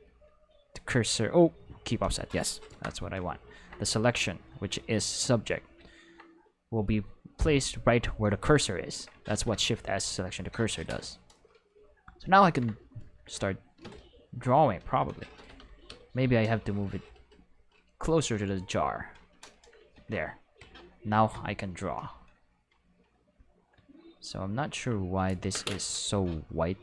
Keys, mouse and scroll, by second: 0.0 click, 2.6 Home, 4.9 click, 9.2 shift+s, 10.9 Escape, 12.4 ctrl+Tab, 13.1 ctrl+Tab, 13.8 Escape, 15.3 g, 15.8 y, 19.0 click, 19.9 ctrl+Tab, 20.4 click, 24.5 ctrl+middle click, 26.7 middle click.